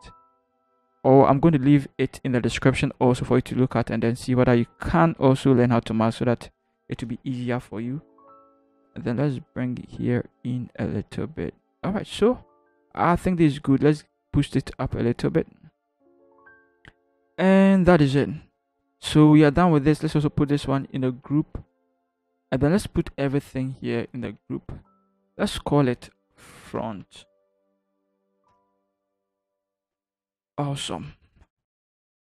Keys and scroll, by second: 8.6 x, 21.5 ctrl+g, 24.7 ctrl+shift+g, 26.3-27.0 typing, 28.1 t, 28.5 Return, 30.5 ctrl+-.